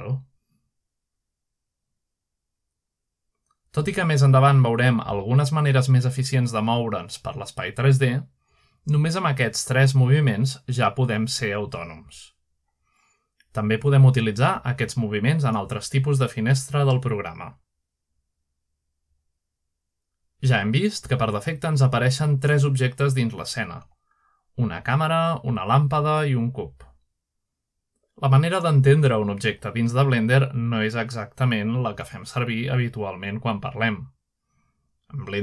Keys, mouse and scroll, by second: 5.9-6.5 shift+middle drag, 6.9-7.4 shift+middle drag, 9.0-9.8 middle drag, 9.3-9.8 scroll up 2, 10.3-11.2 ctrl+middle drag, 10.8-11.2 scroll up 1, 11.2-11.6 scroll down 1, 12.6 ctrl+middle drag, 14.0 middle click, 15.0 ctrl+middle drag, 15.6-15.9 ctrl+shift+middle drag, 16.3-16.7 ctrl+middle drag, 17.3-18.1 ctrl+middle drag, 17.9-18.4 scroll down 1, 18.4 scroll up 1, 19.7 click, 20.3-20.9 scroll down 2, 21.0-21.3 scroll up 1, 21.5-22.2 scroll down 2, 23.5 click, 25.1 click, 25.8-26.6 scroll down 1, 26.9 click, 27.9 click, 28.8 click, 29.6 scroll up 1, 30.1-30.7 shift+middle drag, 30.4 shift+scroll up 2, 32.4 shift+middle drag, 33.0-33.8 shift+middle drag.